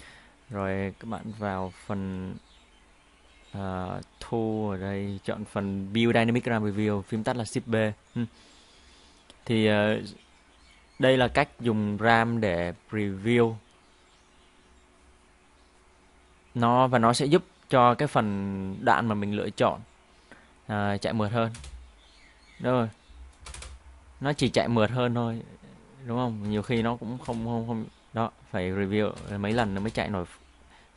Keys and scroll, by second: 21.6 space, 23.5 space, 24.4 space, 26.5-29.8 typing.